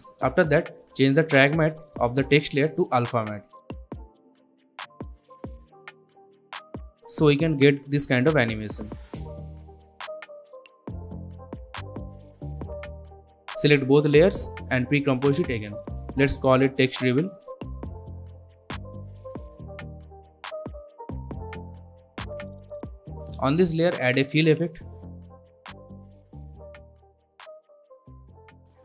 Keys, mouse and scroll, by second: 0.3-0.6 scroll down 1, 0.6-1.7 scroll up 1, 1.7 click, 6.6-10.2 drag, 10.2-10.9 scroll down 1, 10.9-12.3 drag, 14.1 right click, 15.0 click, 16.1-18.9 typing, 19.6 Return, 20.9-22.7 drag, 25.4-27.2 typing, 27.3 Return, 28.5-28.8 drag.